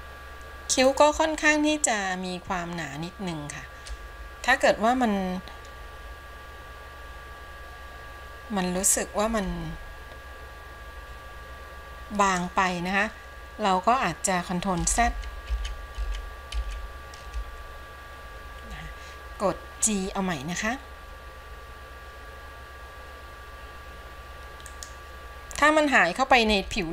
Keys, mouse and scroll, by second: 15.8 ctrl+z, 16.9 ctrl+z, 20.0 g.